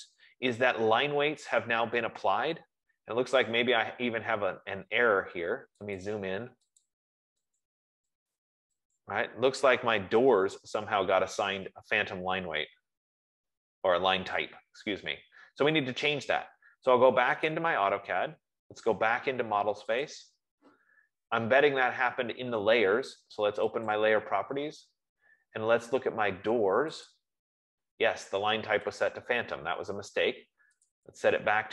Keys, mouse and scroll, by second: 6.5-14.3 drag, 17.9 click, 20.4 click, 24.2 click, 27.4 click, 29.3 click, 31.2 click.